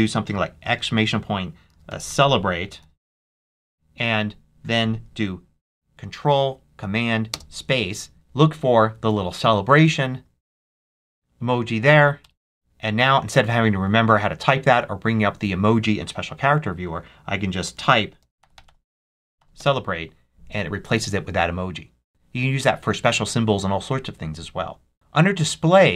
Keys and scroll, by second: 0.5-3.6 typing, 4.0 Tab, 7.2 ctrl+super+space, 8.1 e, 12.1 Return, 17.4-19.8 typing.